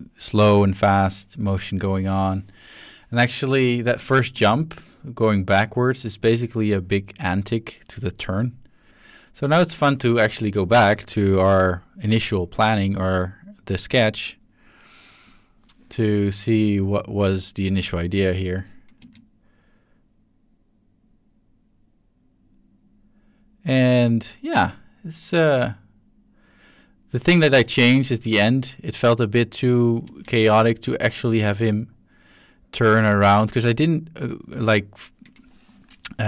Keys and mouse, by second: 4.3 space, 4.8-6.2 drag, 6.7-7.5 drag, 8.9-9.5 drag, 9.8-10.7 drag, 13.5-14.4 drag, 15.2 click, 16.5-17.0 drag, 19.0 space, 30.0 space, 31.1-34.4 drag.